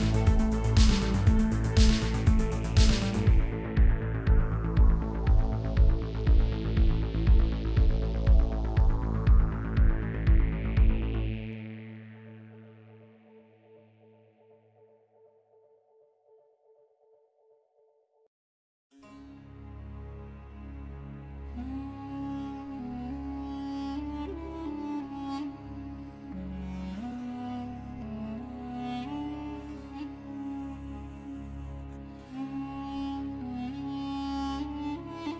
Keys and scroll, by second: 6.6 ctrl+b, 13.2 ctrl++, 19.5 3, 22.5 u, 33.4 i.